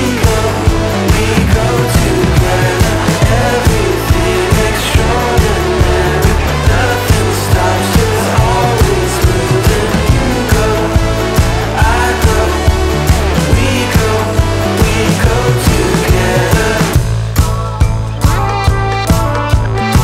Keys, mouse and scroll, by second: 5.7 click, 15.3 click, 18.7 click.